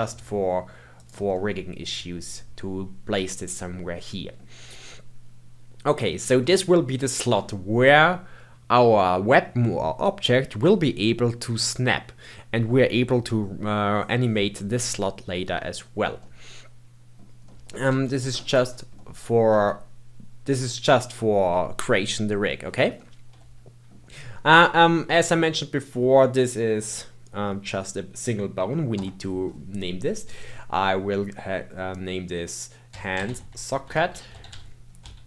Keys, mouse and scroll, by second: 0.0 g, 1.3-3.2 middle drag, 3.2-3.5 scroll down 1, 3.5-9.5 middle drag, 16.2-17.8 middle drag, 17.8 g, 18.9 middle click, 19.5 g, 22.9-27.6 middle drag, 28.9 F2.